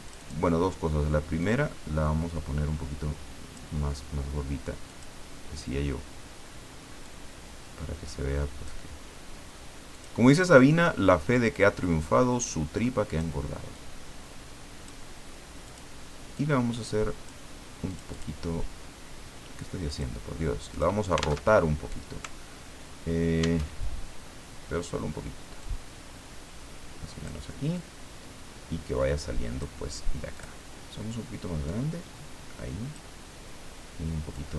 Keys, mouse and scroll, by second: 0.1 click, 1.4-3.8 drag, 4.9 click, 7.0-8.9 drag, 9.9 click, 11.6-13.3 drag, 13.7-15.1 drag, 15.7 click, 16.3-17.5 drag, 17.9 click, 19.9 click, 20.7 click, 21.5 alt+Tab, 23.6 alt+Tab, 25.6-27.6 drag, 27.7-29.8 drag, 30.3 click, 31.1-33.2 drag, 34.3 click.